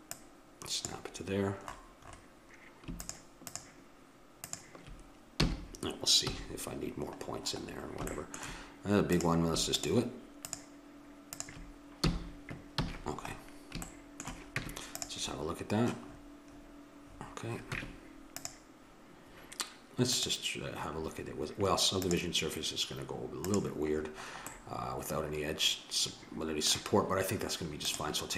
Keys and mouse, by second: 3.0-5.4 drag, 5.4 f, 6.3 a, 9.2 click, 12.0 f, 12.8 a, 14.6 Tab, 15.0-16.6 drag, 17.7 Tab, 20.1-22.1 drag, 23.5-25.4 drag, 27.8-28.3 drag.